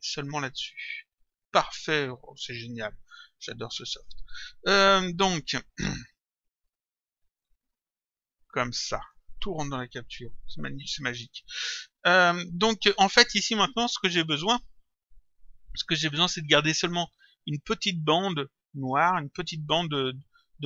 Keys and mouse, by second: 2.7 click, 7.4 click, 14.6 click.